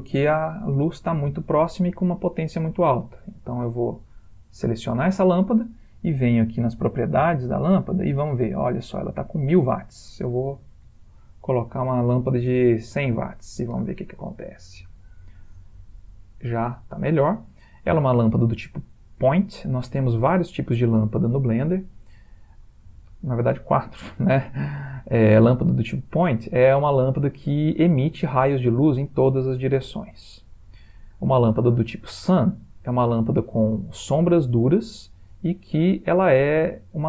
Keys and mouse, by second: 3.5 click, 5.7 typing, 7.5 click, 9.6 click, 14.7 ctrl+middle click, 16.0 ctrl+middle click, 17.6 middle click, 20.4 shift+middle click, 20.5 shift+middle click, 21.2 middle click, 22.5 middle click, 23.1 shift+middle click, 32.0 click, 33.8 r.